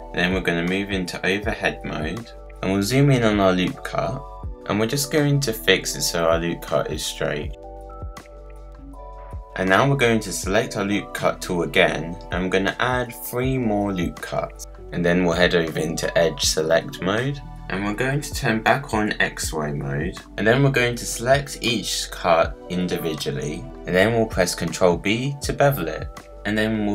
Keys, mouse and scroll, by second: 0.6-1.2 scroll up 1, 1.2-1.7 scroll up 3, 2.0 click, 3.0 click, 4.1 KP_Decimal, 4.4-5.2 scroll down 5, 5.2 click, 5.9 scroll down 1, 7.0-8.3 drag, 8.4-10.0 scroll down 7, 8.7 click, 10.0-16.7 drag, 17.0-19.9 drag, 20.9 click, 22.7 shift+click, 23.8 shift+click, 25.4 ctrl+b.